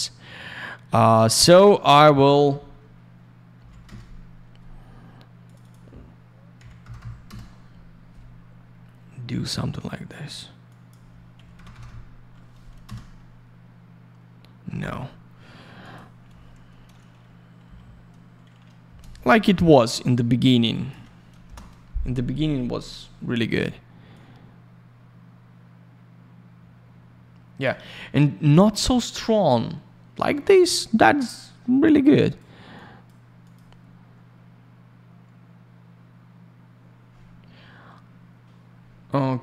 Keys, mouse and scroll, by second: 1.9 click, 1.9 click, 2.0 click, 2.1 double click, 3.5 5, 3.8 Return, 5.4 click, 5.5 click, 5.6 click, 5.7 double click, 6.5 typing, 7.2 Return, 10.6 click, 11.1-12.3 typing, 12.8 Return, 15.8 click, 15.9 click, 18.8 Return, 20.7 click, 21.4 Return, 24.1 click, 31.8 click, 32.7 click, 33.4 click, 33.5 click.